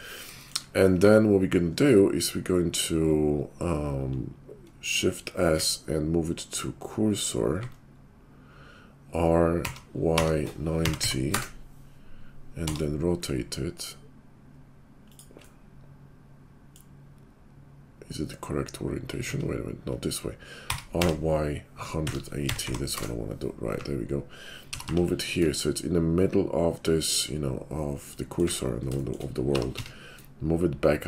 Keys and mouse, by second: 5.5 shift+s, 9.5 r, 16.0-31.0 middle drag, 19.3 ctrl+z, 20.6 r, 23.0 \, 23.7 `, 24.7 g, 28.4 `, 29.5 g.